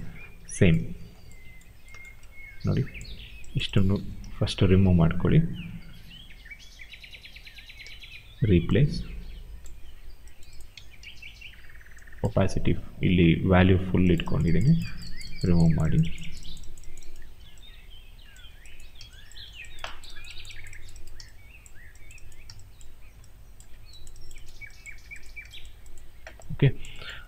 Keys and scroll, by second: 3.8 ctrl+z, 10.6 ctrl+z.